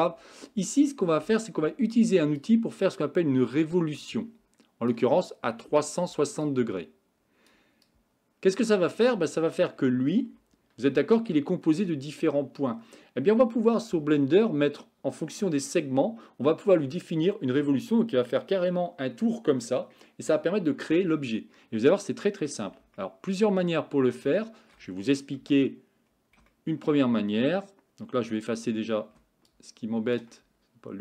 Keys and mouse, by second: 2.4-3.8 drag, 4.1 click, 5.3 click, 6.5-7.5 drag, 7.9-9.2 drag, 11.0 Tab, 11.3 middle click, 22.0 middle click, 23.1 shift+middle click, 24.4 shift+middle click, 25.4 KP_1, 26.5 shift+middle click, 29.5 ctrl+click.